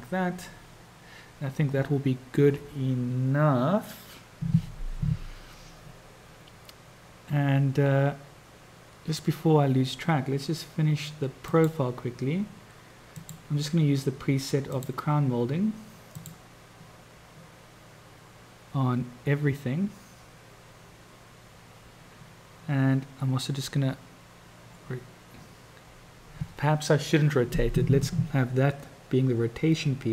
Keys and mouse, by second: 11.5 click, 13.3-15.1 drag, 16.3 click.